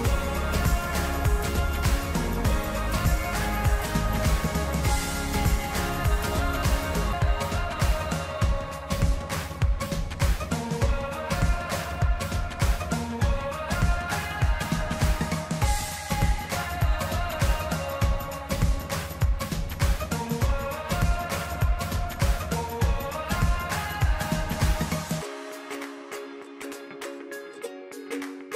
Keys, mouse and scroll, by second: 5.0 click, 8.9 click, 13.3 click, 17.1 right click, 19.0 click, 23.2 click.